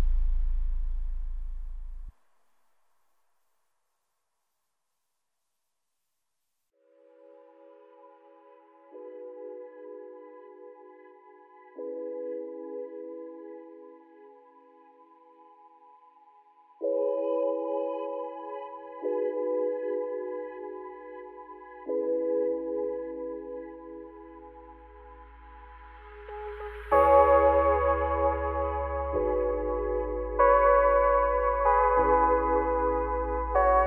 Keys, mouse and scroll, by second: 2.6-3.4 scroll down 2, 3.4 scroll up 1, 3.6 r, 5.8 r, 8.5-10.8 scroll up 1, 10.8 r, 25.0 click, 26.1 click.